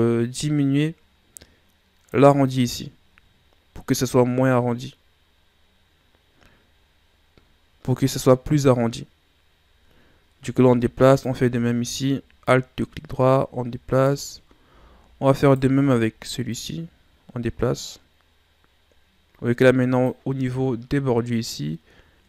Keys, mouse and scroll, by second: 11.0 alt+right click, 12.4-15.3 drag, 15.3 alt+right click, 16.5-19.5 drag.